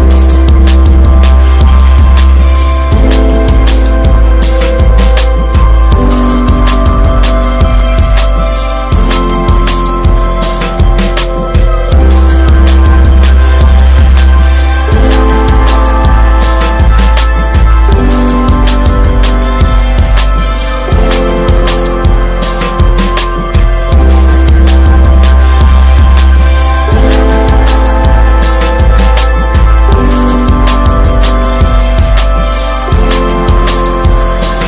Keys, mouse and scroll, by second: 2.0-2.8 shift+middle drag, 2.8 r, 5.6 scroll up 2, 6.0 alt+z, 6.3-7.2 middle drag, 7.2 alt+z, 7.6-8.2 middle drag, 8.2 scroll up 3, 8.6-9.7 shift+middle drag, 9.7 click, 11.8 alt+middle click, 12.3 scroll down 3, 12.6 alt+middle click, 13.2-14.0 shift+middle drag, 14.0 r, 15.1-15.9 shift+middle drag, 15.9 r, 18.0 scroll down 1, 18.3-18.8 middle drag, 18.8 ctrl+s, 18.9 scroll down 1, 19.2 middle click, 19.5 scroll up 1, 21.1 click, 24.4 middle click, 24.6 Tab, 25.3 alt+z, 25.8 alt+middle click, 26.4 alt+middle click, 26.6-27.0 scroll up 6, 27.0 shift+middle click, 27.7 r, 29.4 Tab, 29.8 alt+z, 29.9 scroll down 5, 30.3-30.7 middle drag, 30.7 ctrl+s, 30.8 drag, 31.2-31.6 middle drag, 31.6 scroll up 1, 31.9-32.3 middle drag, 32.3 ctrl+s, 33.3-34.6 drag.